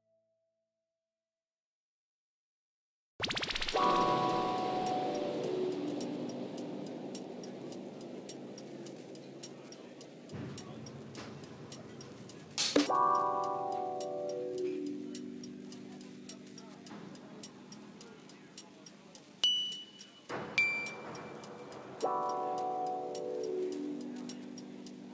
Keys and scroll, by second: 4.7 ctrl+b, 9.5 ctrl+r, 11.1 ctrl+r, 13.1 s, 15.0 Tab, 16.0 alt+a, 22.6 Left, 23.4 3, 23.5 d, 23.6 l, 23.9 s.